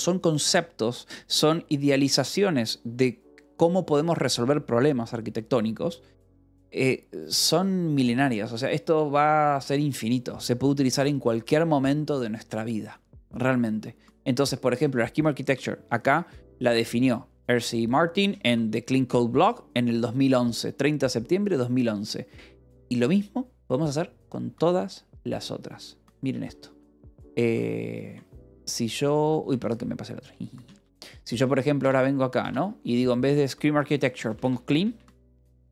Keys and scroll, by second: 21.3 k, 25.9 ctrl+j, 26.2 Escape, 28.2 shift+j, 29.4 shift+l, 30.1 shift+k, 31.2 shift+h, 31.7 f, 32.3 s, 32.8 Left, 34.3 BackSpace, 35.2 c, 35.5 l.